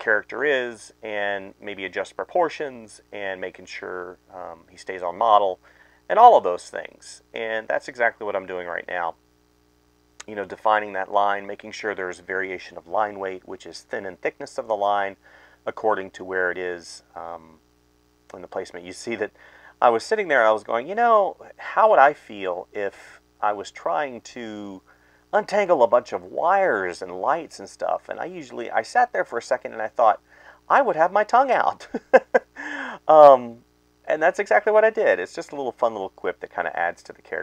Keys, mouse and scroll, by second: 0.7 space, 2.3-4.4 typing, 4.2 ctrl+z, 5.6-7.9 typing, 12.8 space, 13.5 space, 15.1 space, 15.8 space, 16.3 space, 16.8 space, 18.1-20.4 typing, 21.8 space, 22.1 space, 24.4 space, 25.1 right click, 25.7 right click, 27.4-29.4 typing, 28.9 ctrl+z, 29.8 ctrl+z, 30.9 space, 32.2-35.1 typing, 32.3 ctrl+z, 36.1-37.4 typing.